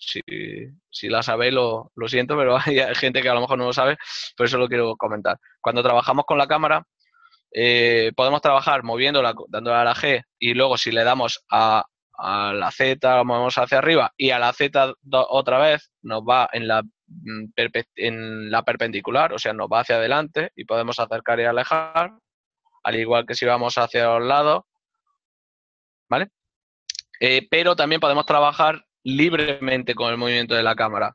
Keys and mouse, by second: 8.9 g, 11.1 g, 12.5 z, 15.4 z, 29.3 y, 29.4 right click.